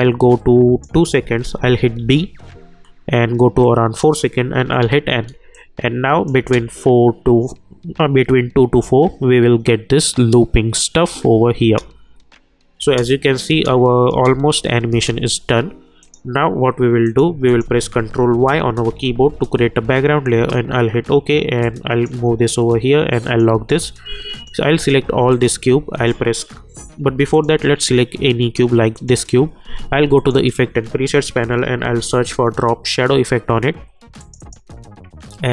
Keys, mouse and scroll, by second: 2.0 b, 3.6 click, 4.8 n, 5.5 click, 6.4 space, 11.6 space, 16.0 click, 18.4 ctrl+y, 20.3 Return, 21.6-23.2 drag, 31.1-32.5 typing.